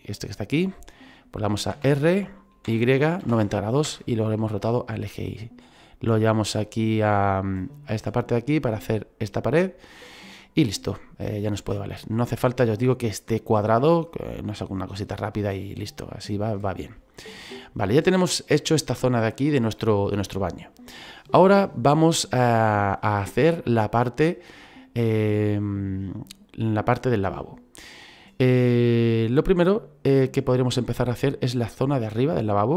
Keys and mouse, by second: 1.7 r, 2.7 y, 3.2 KP_9, 3.3 KP_0, 3.9 Return, 3.9 KP_Enter, 5.4 middle click, 6.2 click, 7.9 middle click, 8.7 click, 10.1 middle click, 12.4 click, 14.4 middle click, 15.8 click, 17.0 middle click, 18.3 middle click, 19.5 shift+middle click, 21.6 shift+middle click, 28.3 middle click.